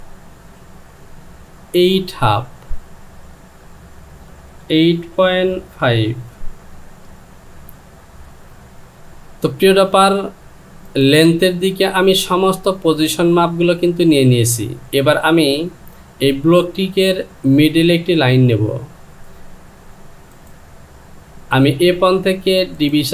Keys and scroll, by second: 4.7 KP_8, 6.7 Return.